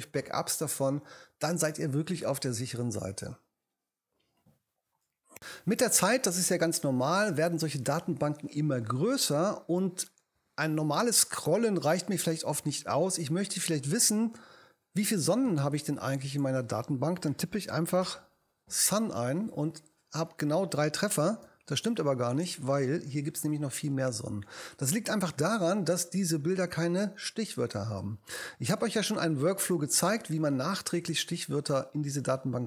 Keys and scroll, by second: 17.0-18.5 typing, 21.4 BackSpace.